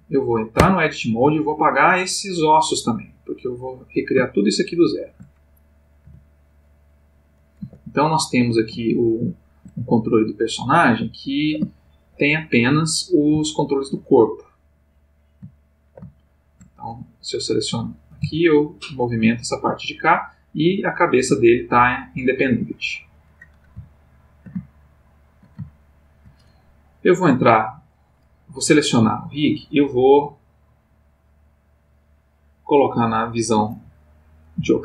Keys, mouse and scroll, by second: 0.6 Tab, 1.5-3.1 drag, 4.5 shift+click, 6.0 Delete, 6.6 click, 7.6 Tab, 8.7 \, 8.9 middle click, 10.5 click, 11.2 middle click, 11.6 \, 12.7 click, 13.5-14.0 middle drag, 14.9 click, 15.5-16.8 ctrl+middle drag, 17.4 click, 18.2 g, 22.6 Escape, 23.8-25.5 ctrl+middle drag, 25.7-26.4 ctrl+shift+middle drag, 27.2 click, 30.0 click, 31.4 click, 33.3 click, 34.6 click.